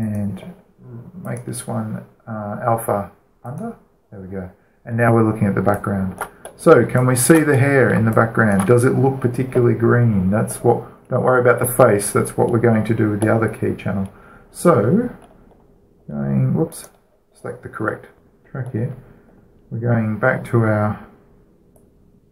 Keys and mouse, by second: 0.8-2.7 right drag, 2.1-3.7 drag, 4.2-6.0 drag, 6.5-11.1 alt+shift+middle drag, 14.1-19.1 middle drag, 19.1 right click, 19.5-22.3 middle drag.